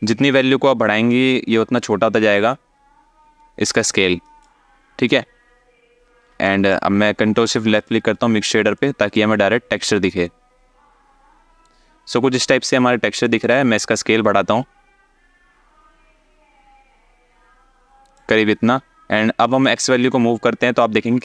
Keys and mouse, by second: 6.2 alt+shift+middle click, 7.5 ctrl+shift+click, 8.4 alt+shift+middle click, 13.1 click, 19.3 shift+click.